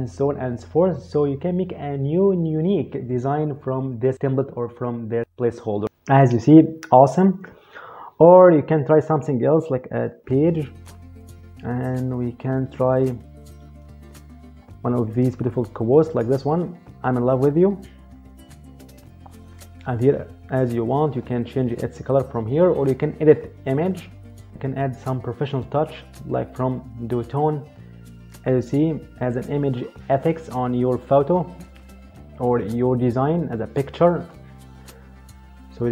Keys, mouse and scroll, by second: 10.0 click, 17.5 click, 19.8 click, 23.9 click.